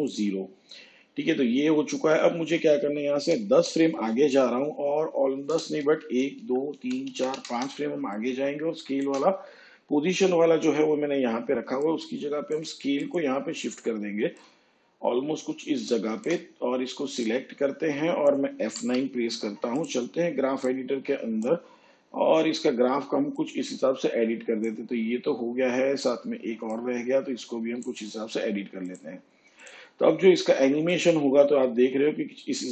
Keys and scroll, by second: 3.1 shift+Page_Down, 6.0 ctrl+Left, 18.7 F9.